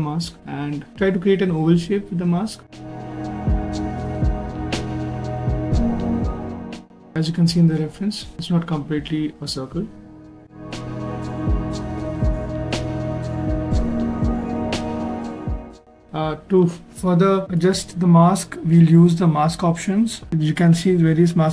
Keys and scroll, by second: 12.7 s, 14.2 s, 18.2 q.